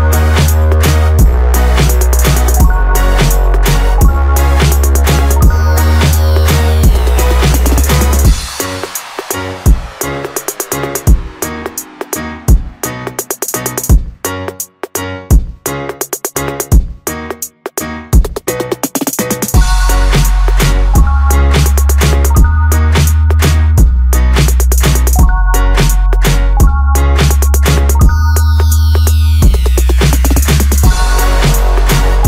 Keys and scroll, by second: 22.6 ctrl+z, 26.3 Return.